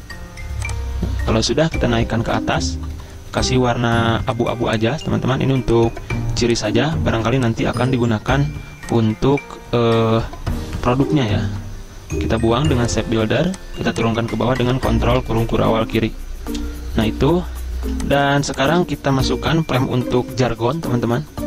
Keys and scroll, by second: 1.2 v, 2.0 ctrl+shift+], 2.7-3.9 typing, 7.2 v, 11.4 m, 13.4 v, 15.2 ctrl+[, 15.6 ctrl+[, 17.8 z.